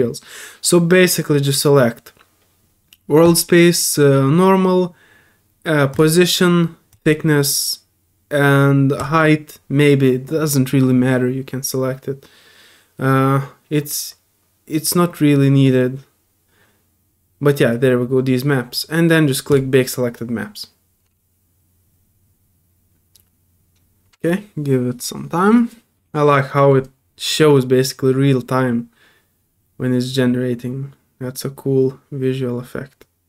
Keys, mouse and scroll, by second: 3.2 click, 5.9 click, 6.9 click, 9.0 click, 19.5 drag.